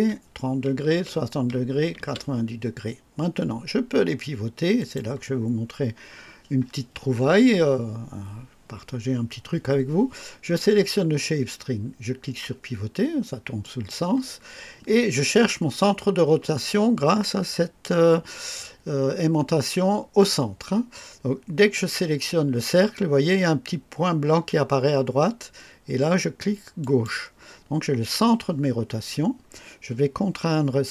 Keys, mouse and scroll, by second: 0.8 ctrl+v, 1.9 ctrl+v, 4.7 click, 13.5 click, 26.7 click.